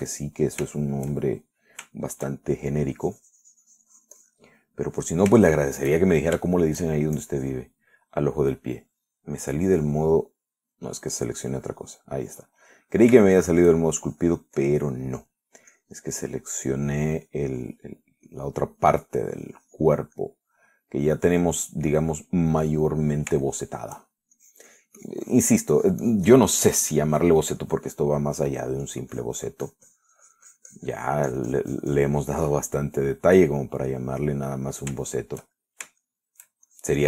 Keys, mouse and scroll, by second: 1.0 shift+middle click, 2.0-3.0 shift+middle drag, 3.2 shift+middle click, 4.2-5.7 shift+drag, 5.8-8.1 middle drag, 8.4 shift+click, 11.6 middle click, 13.9-15.0 middle drag, 15.3-16.4 shift+drag, 16.4 middle click, 17.0 click, 17.5 middle click, 18.1 click, 20.1-21.3 drag, 21.4-24.6 middle drag, 24.7 shift+middle click, 25.6-26.8 shift+drag, 27.0-29.0 drag, 29.1 middle click, 30.1-34.0 drag, 34.1 middle click, 34.7-37.0 middle drag.